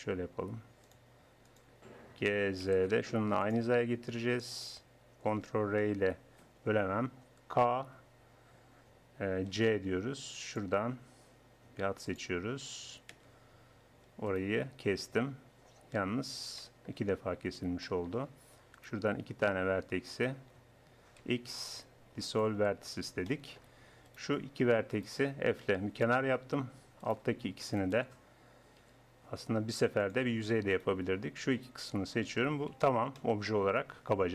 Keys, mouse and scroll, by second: 0.9-3.5 drag, 2.2 g, 5.9 ctrl+r, 7.9 k, 14.3-16.2 drag, 16.2-18.7 middle drag, 18.7-21.2 drag, 21.2 x, 22.8 click, 25.0 click, 25.7 f, 26.3-28.8 drag, 28.8 f, 29.6-30.7 drag, 30.7-31.7 middle drag, 31.7 click, 32.3 f, 32.5 click.